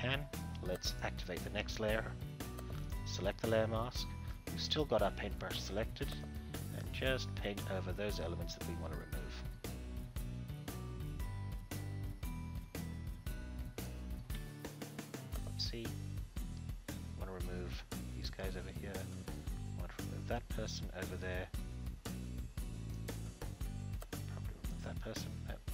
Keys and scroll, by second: 14.3 ctrl+z.